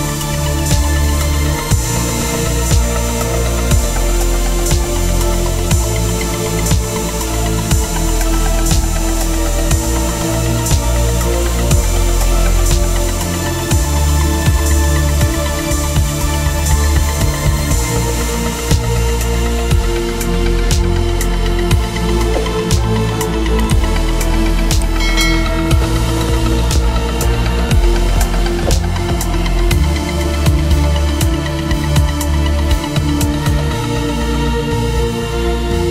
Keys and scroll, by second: 0.4 Return, 0.5 v, 1.1 Return, 2.9 ctrl+z, 3.9 v, 5.9 ctrl+z, 7.5 ctrl+t, 9.5 Up, 10.9 Right, 11.7 Left, 12.4 Up, 12.6 Down, 14.7 Return, 24.5 Return, 25.1 t, 27.2 Return, 28.5-30.8 typing, 31.1 ctrl+Return.